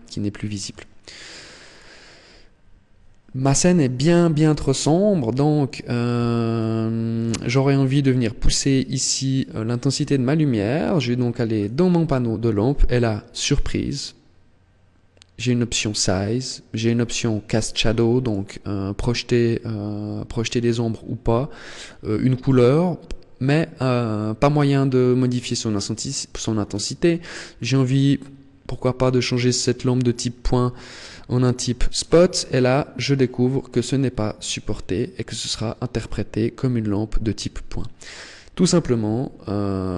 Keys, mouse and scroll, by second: 1.0 click, 5.3 click, 8.1 right click, 11.3 click, 16.5 click, 17.9 click, 31.2 click, 33.5 click, 36.7 click.